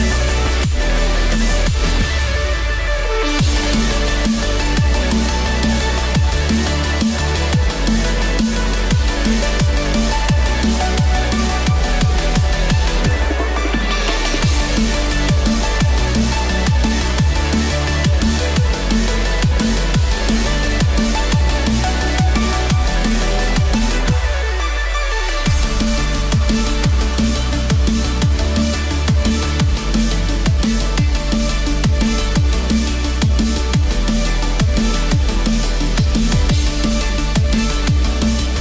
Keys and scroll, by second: 7.7 BackSpace, 32.0 BackSpace.